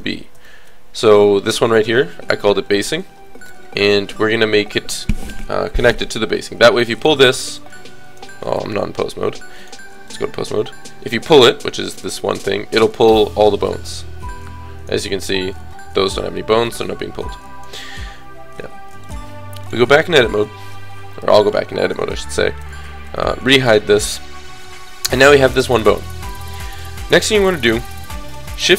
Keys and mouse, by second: 0.6 alt+h, 1.2-2.7 drag, 7.0-8.5 drag, 8.5 ctrl+z, 9.4 click, 9.5 right click, 10.9 click, 11.8-13.0 drag, 16.8-18.8 drag, 19.0 click, 19.2 middle click, 19.7 click, 20.0 middle click, 20.7 KP_1, 21.1 KP_3, 23.7 h.